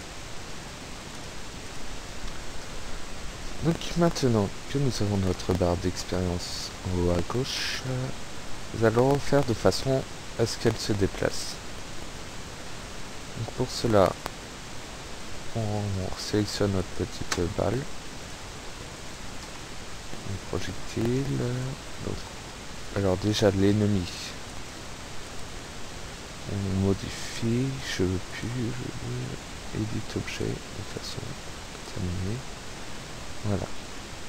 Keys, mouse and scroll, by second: 0.1 click, 1.2 click, 1.8 click, 4.8 p, 5.3 Escape, 11.9 click, 14.2 click, 15.0 click, 16.8 right click, 18.3 click, 19.2 click, 21.5 click, 23.3 click, 24.6 right click, 25.2 right click, 27.2 click, 28.4 click, 30.5 click, 31.0 click, 31.8 click.